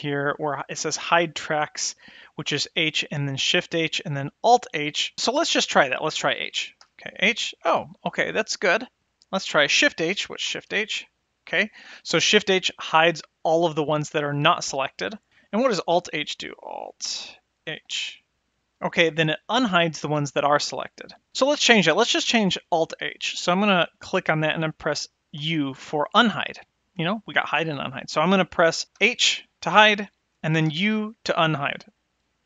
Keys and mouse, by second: 6.8 h, 10.7 shift+h, 17.7 alt+h, 24.0 click, 29.0 h, 30.7 u.